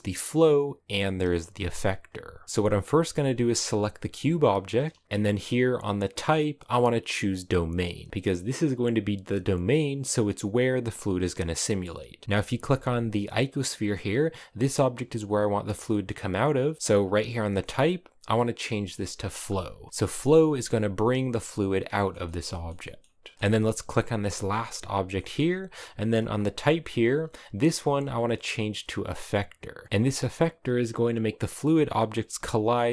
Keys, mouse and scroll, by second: 2.2-2.8 scroll down 6, 2.8 right click, 8.7 click, 10.3-10.7 scroll down 2, 11.3 middle click, 12.2 scroll up 1, 12.3 g, 15.6-19.4 middle drag, 19.4 click, 19.9-23.8 middle drag, 23.8 right click, 24.9-29.2 shift+middle drag, 29.2 click, 29.8-32.1 middle drag, 32.1 g.